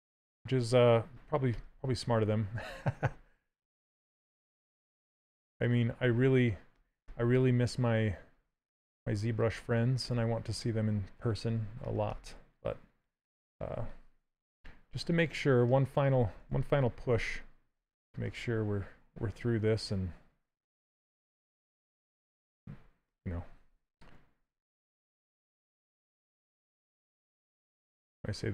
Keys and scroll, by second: 3.3 s, 16.7 ctrl+z.